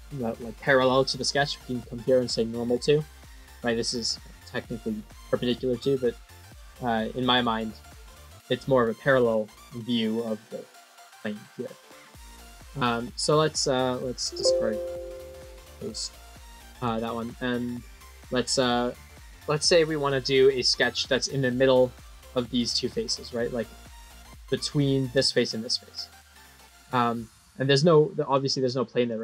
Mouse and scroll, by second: 1.0 right click, 4.1 click, 8.5 middle click, 12.8 scroll up 2, 14.0 click, 14.9 click, 15.5 middle click, 16.4 middle click, 16.8-17.9 middle drag, 19.5-20.9 middle drag, 21.2 middle click, 22.7 middle click, 23.2 click, 23.6-24.0 middle drag, 24.5 middle click, 25.2 click, 25.5 middle click, 26.4-27.5 middle drag, 28.2 click, 29.0 click.